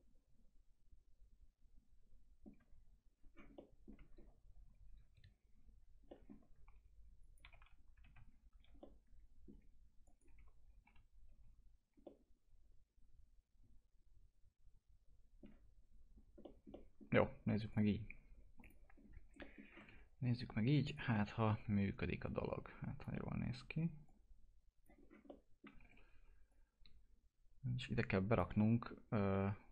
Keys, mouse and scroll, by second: 3.1 scroll down 1, 3.5 alt+middle click, 4.1-5.9 scroll up 1, 6.1 middle click, 7.2 click, 7.4 2, 8.8-10.3 alt+middle drag, 10.3 1, 12.0-16.1 alt+middle drag, 16.1 scroll down 1, 16.4 middle click, 17.7 click, 18.9-19.4 scroll up 1, 19.4 middle click, 19.7 typing, 20.3 click, 21.1 alt+middle click, 21.6 w, 22.2 click, 23.4 alt+middle click, 24.0 click, 25.0 scroll up 1, 25.2 alt+middle click, 25.8 e, 26.5-28.5 drag, 28.5 alt+middle click, 29.0 scroll down 1, 29.6-29.7 alt+middle drag.